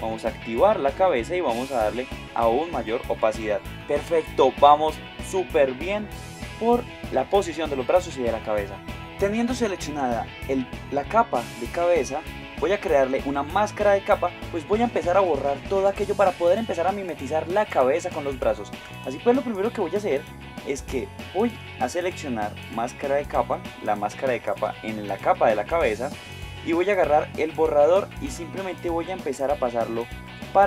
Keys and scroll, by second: 16.0 space, 21.5 space, 28.2 x.